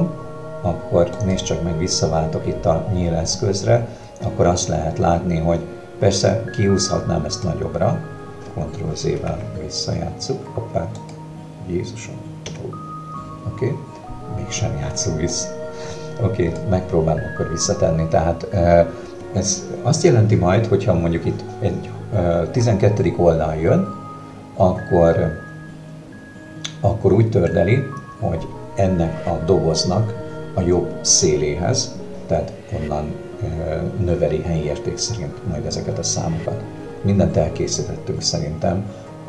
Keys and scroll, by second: 9.2 alt+z, 12.5 Escape.